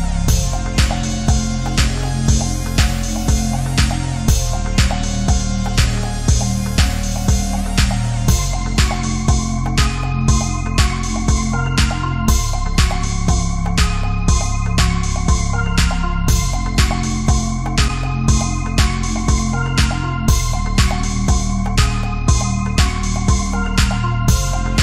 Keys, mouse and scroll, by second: 0.5 ctrl+z, 0.6 click, 1.2 ctrl+z, 1.3 [, 1.5-2.8 drag, 2.8-3.2 scroll up 1, 3.2 click, 3.7 space, 3.8 alt+click, 4.2 click, 5.9-7.2 typing, 6.4 click, 7.3 alt+click, 8.8-10.4 typing, 9.2 ctrl+click, 9.9 click, 10.6-13.6 drag, 13.8 space, 13.9 click, 14.0 space, 14.1 click, 15.4 click, 16.9 space, 16.9 click, 17.2 space, 17.4 alt+click, 18.1 space, 18.2-21.4 alt+drag, 21.4 space, 21.9 ctrl+click.